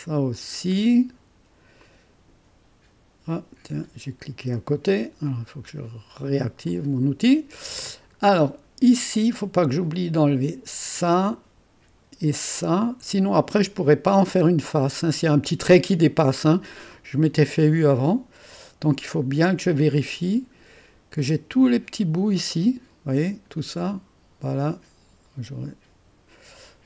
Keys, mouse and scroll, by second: 0.3 click, 1.8-2.8 drag, 5.3 click, 6.7 click, 7.8-8.5 scroll up 6, 8.5-9.6 right drag, 10.9 click, 12.5 click, 14.5-14.9 scroll down 1, 16.9-19.6 right drag, 19.6 click, 20.7-22.0 scroll up 1, 22.1 click, 22.5 click, 23.6 click, 24.5 click.